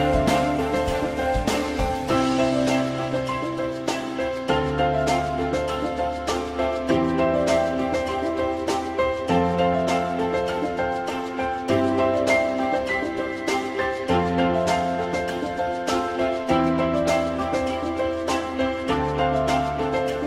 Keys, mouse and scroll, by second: 4.1 alt+middle click, 7.2 alt+middle click, 10.6 alt+middle click, 16.9 F4, 17.4 alt+middle click, 19.6 alt+middle click.